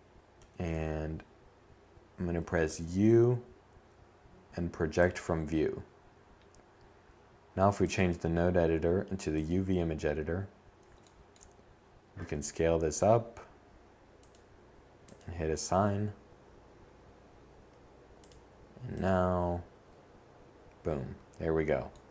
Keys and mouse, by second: 0.4 u, 10.1 s, 16.1 click, 17.8-19.8 middle drag.